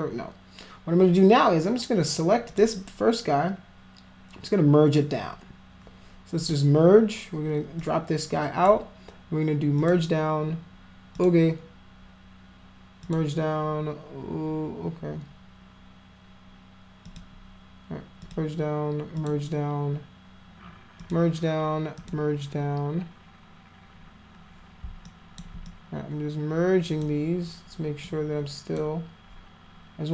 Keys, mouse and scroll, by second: 2.5 click, 6.5 click, 7.8 click, 9.8 click, 11.2 click, 13.1 click, 17.1 click, 18.3 click, 19.2 click, 21.0 click, 22.0 click, 25.1 alt+click, 25.7-27.0 drag, 28.1 click.